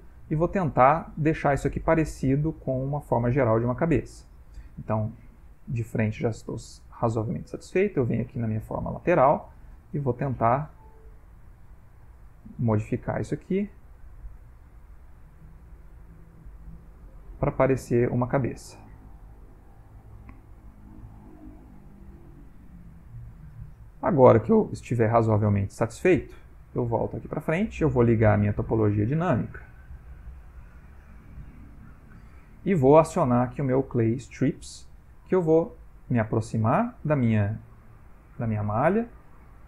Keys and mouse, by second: 0.9 click, 2.5 click, 3.6 click, 5.5 middle click, 7.6 click, 9.0 click, 10.0 click, 10.9 click, 11.7 click, 12.6 click, 13.4 click, 14.2 click, 14.9 click, 15.6 click, 16.6 f, 17.8 click, 18.9 click, 19.7 click, 20.4 click, 20.9 click, 21.2 click, 22.0 click, 22.5 click, 23.3 click, 24.0 click, 25.0 middle click, 27.2 click, 28.5 click, 29.6 ctrl+middle click, 30.8 click, 33.7 click, 34.7 ctrl+middle click, 35.9 shift+middle click, 36.6 ctrl+middle click, 39.3 f.